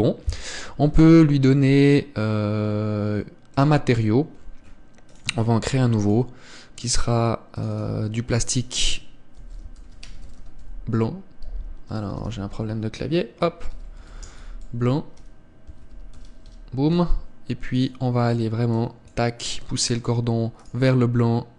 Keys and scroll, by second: 1.3 Escape.